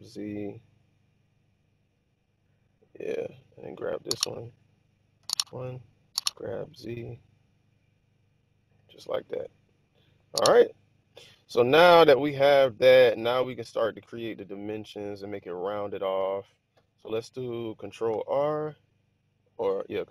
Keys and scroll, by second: 0.6 z, 5.1 1, 6.1 g, 6.8 z, 16.2 1, 18.0 ctrl+r.